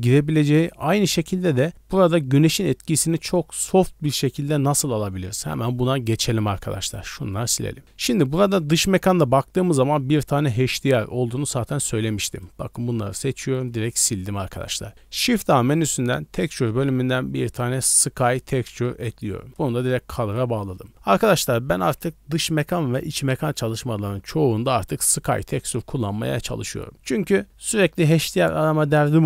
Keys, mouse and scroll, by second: 0.3 scroll down 6, 6.0 d, 6.2 right click, 7.1 scroll down 1, 7.3 middle drag, 7.7 scroll down 1, 8.4-8.7 scroll down 8, 10.7 right click, 11.1 scroll up 1, 11.7 scroll up 2, 12.2 b, 13.0 scroll up 1, 13.3 x, 13.6 middle click, 14.9 shift+a, 19.5-20.4 drag.